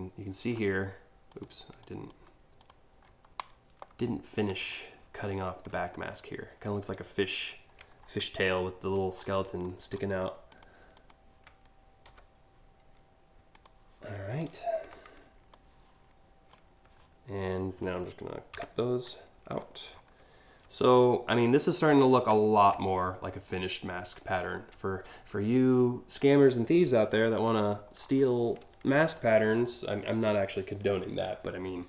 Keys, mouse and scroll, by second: 1.0 click, 1.5 shift+click, 2.2 click, 3.0-3.4 shift+scroll down 1, 4.3 space, 4.3 click, 5.4-5.8 scroll up 7, 7.7-8.4 alt+scroll up 7, 8.7 scroll down 1, 9.6 right click, 10.1 click, 10.6 click, 13.1 click, 15.1-16.1 drag, 18.2 ctrl+x, 19.1-19.7 alt+scroll down 2, 20.5 alt+scroll up 1, 22.4 alt+scroll up 1, 22.9 alt+scroll down 1, 24.2 alt+scroll up 1, 27.6 scroll up 2.